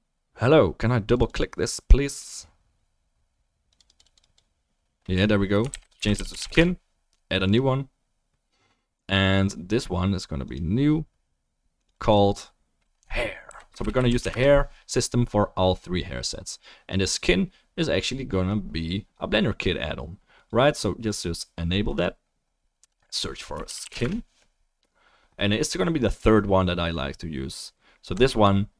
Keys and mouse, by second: 2.4-4.4 drag, 17.6-20.3 drag, 20.4-21.0 drag.